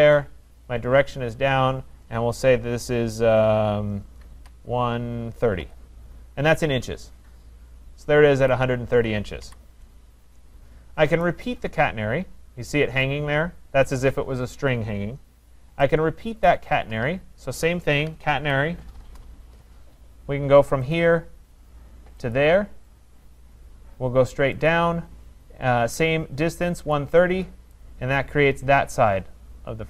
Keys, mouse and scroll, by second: 4.2-6.0 typing, 6.7 Return, 8.5 click, 9.5 Delete, 12.7 right click, 16.5 right click, 18.0-19.1 typing, 21.0 click, 22.4 click, 24.7 click, 26.8 Return.